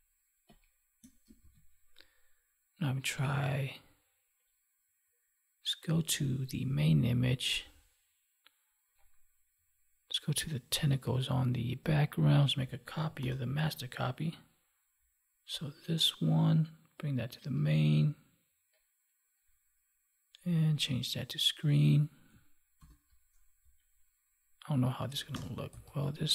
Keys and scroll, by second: 1.3 ctrl+s, 13.1 ctrl+j, 22.7 ctrl+t.